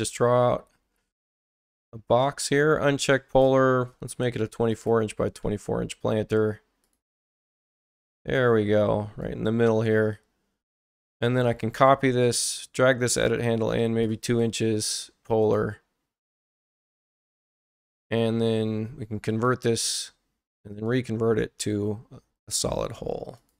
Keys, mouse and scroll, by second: 1.3 Return, 3.8-5.5 typing, 4.4 click, 6.8 click, 8.0-9.2 ctrl+drag, 13.2 click, 15.4 click, 16.2 click, 16.6 1, 16.8 Return, 19.3 click, 20.6 x, 20.7 click, 22.4 click, 23.4 click.